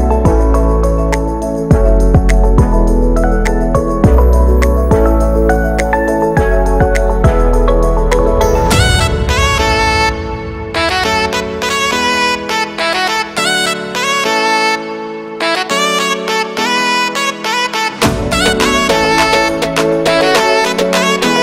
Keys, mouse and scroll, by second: 0.2 middle click, 0.5 scroll up 2, 0.7 g, 1.4 shift+middle click, 2.2 g, 2.7 z, 2.9-4.6 shift+middle drag, 4.6 shift+middle click, 5.5-5.9 scroll up 1, 5.9 ctrl+r, 9.7 ctrl+alt+shift+right click, 10.0 ctrl+b, 11.6 shift+middle click, 12.1-12.8 scroll up 1, 12.8 l, 13.2-13.7 scroll down 1, 13.7 KP_1, 14.2 scroll up 1, 14.4 z, 15.2-15.8 scroll up 1, 15.8 click, 16.1 b, 20.4 a, 20.6 a, 20.6 b.